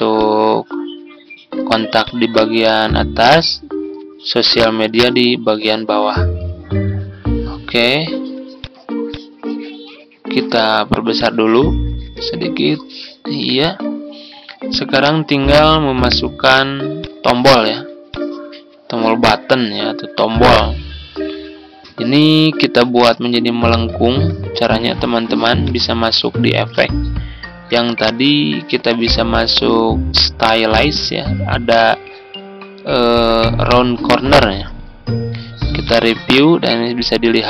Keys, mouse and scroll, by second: 8.5-13.2 drag, 14.2-37.4 drag, 14.2 z.